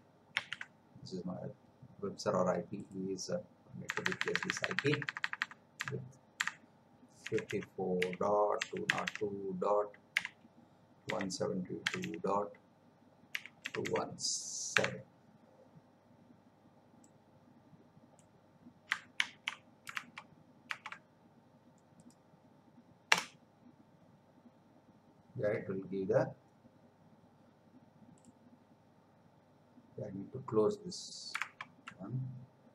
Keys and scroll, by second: 0.3 ctrl+v, 3.9 BackSpace, 7.2 5, 13.3 ., 19.2 ctrl+c, 20.1 alt+Tab, 23.1 Return, 31.6 alt+Tab.